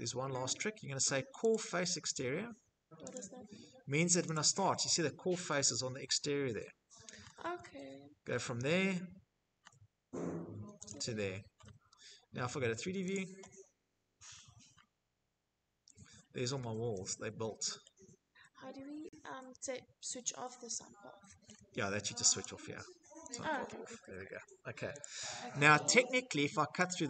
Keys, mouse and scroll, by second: 0.3 click, 1.9 click, 3.1 click, 4.6 scroll, 5.4 middle click, 5.8 middle click, 6.0-8.1 scroll, 8.3-9.6 scroll, 9.6 click, 10.0 click, 10.1 click, 10.1-10.5 scroll, 10.5 Escape, 11.8 click, 12.9-13.6 scroll, 14.9 Escape, 15.1 Escape, 15.3 Escape, 15.5 middle click, 15.8 middle click, 16.1 middle click, 16.2 middle click, 20.2-24.3 shift+middle click, 21.1 click, 22.0 click, 23.7 click, 24.0 click, 24.0 click, 24.9 middle click, 25.0 middle click, 25.6 click, 26.6-27.0 scroll.